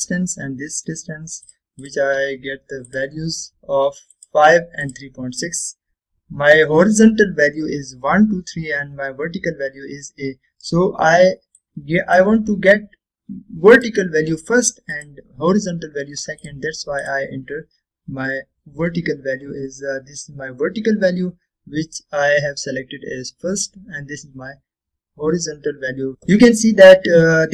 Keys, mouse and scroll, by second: 1.0 right click, 2.5 click, 3.0 click, 12.7 click, 12.7-13.3 drag, 19.2 scroll up 1, 26.1 scroll down 1, 26.3-27.2 middle drag.